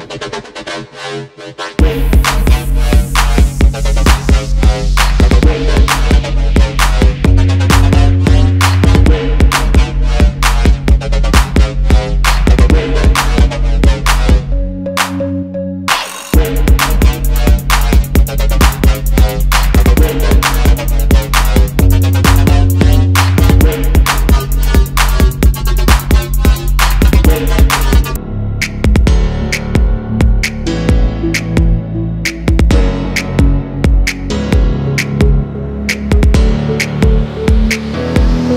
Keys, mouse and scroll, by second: 0.6 alt+scroll up 1, 1.0 space, 1.3 alt+scroll down 1, 1.7 space, 6.5 alt+scroll up 1, 7.0 space, 7.1 double click, 7.7 right click, 8.4 double click, 9.1 ctrl+F11, 9.3 alt+scroll down 1, 9.6-10.3 alt+scroll up 2, 10.3 shift+click, 12.5 alt+scroll down 1, 13.0 space, 14.1 shift+click, 15.3 alt+scroll down 2, 15.8 alt+scroll up 1, 16.5 Up, 16.6 Up, 16.6 Up, 16.7 Up, 17.3-17.7 alt+scroll down 1, 18.0 space, 18.5-18.9 alt+scroll down 1, 19.3 alt+scroll up 1, 19.6 space, 20.2 alt+scroll down 1, 21.2 alt+scroll up 1, 22.0 shift+click, 23.2 alt+scroll up 1, 24.3 right click, 25.3 double click, 27.3 double click, 28.0 alt+scroll up 1, 28.8-29.4 alt+scroll down 2, 29.6 shift+click, 31.9 space, 33.3 shift+click, 34.4 alt+scroll down 1, 34.7 alt+scroll up 1, 36.1 shift+click, 36.8 shift+click, 37.8 double click.